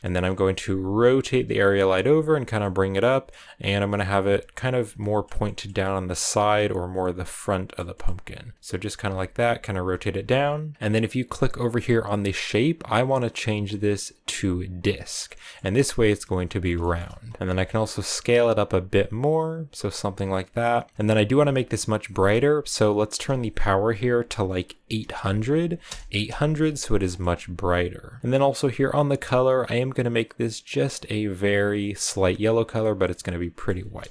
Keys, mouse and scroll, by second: 0.0 middle click, 0.1-0.5 scroll down 6, 0.5 r, 2.0 g, 2.5 middle click, 3.5 g, 4.2 r, 4.9 middle click, 5.7 r, 6.2 g, 7.3 middle click, 8.0 r, 8.9 g, 9.4 r, 9.8 g, 14.7 click, 15.3-17.4 middle drag, 17.4 s, 20.9 middle click, 21.2 g, 23.7-25.7 drag, 25.7 0, 26.7 scroll up 1, 26.8 middle click, 27.3 r, 27.6 g, 29.5 click, 33.1-34.1 middle drag.